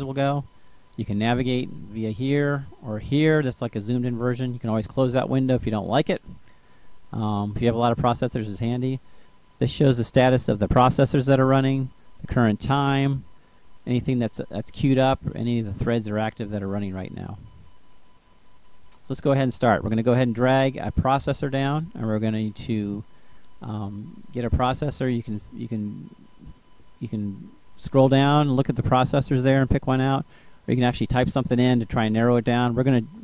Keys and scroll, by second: 32.0-33.2 typing.